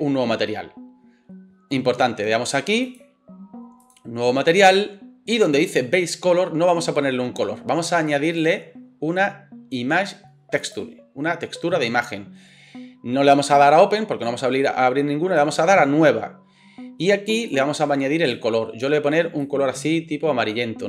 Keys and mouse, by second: 2.9 middle click, 3.8-20.8 drag.